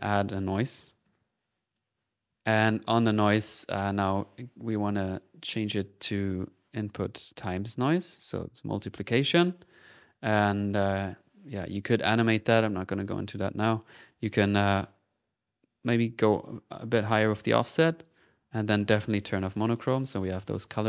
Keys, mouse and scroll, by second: 0.0 right click, 0.3 click, 0.6-1.7 typing, 1.2 click, 1.7 click, 6.6 click, 7.3 click, 8.1 click, 8.3 click, 9.4 click, 9.9 click, 14.3 click, 16.3-18.3 drag, 18.9 click, 19.6 click.